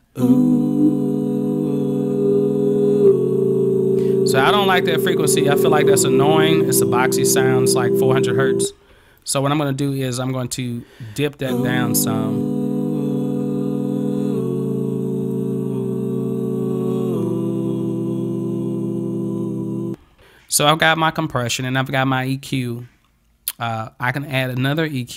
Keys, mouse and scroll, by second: 3.1-5.2 drag, 4.1 right click, 9.2-15.4 drag, 24.4 click.